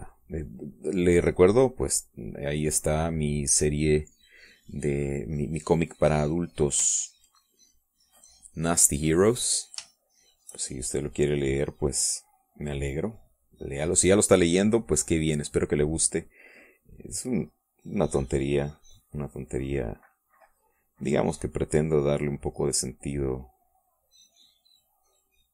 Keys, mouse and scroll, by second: 9.6 click, 10.9 shift+click, 11.5-14.7 shift+drag, 15.5 click, 17.3-25.5 drag, 23.2-25.5 middle drag.